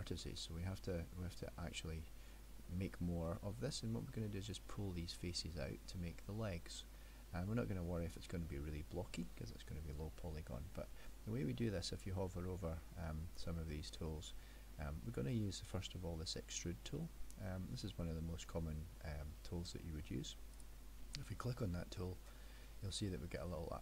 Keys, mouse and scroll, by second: 0.2 middle click, 5.7 middle click, 7.0 middle click, 20.6 click.